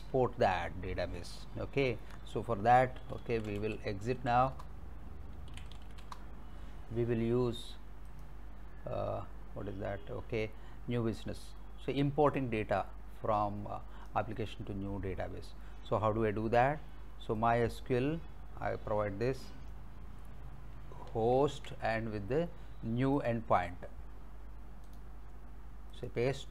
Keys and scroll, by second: 2.8-6.4 typing, 4.6 Return, 21.4 ctrl+c.